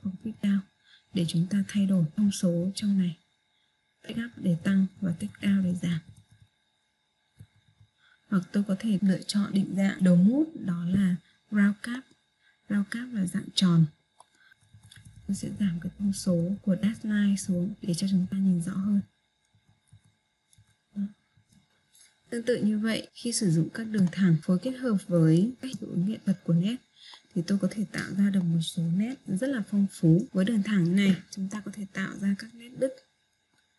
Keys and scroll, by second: 3.1 Page_Up, 18.5 Page_Down.